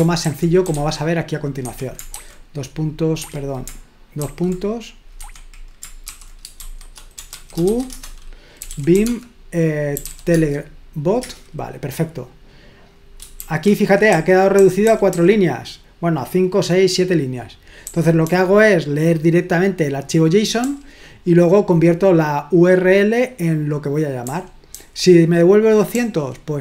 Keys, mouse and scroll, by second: 0.4-2.1 typing, 1.6 Escape, 3.3 Escape, 4.2 ;, 5.2 Escape, 6.0-10.5 typing, 7.9 Return, 11.2 Return, 13.5-15.3 typing, 18.0-18.7 typing, 20.6 j, 24.3-24.7 typing, 26.0 j.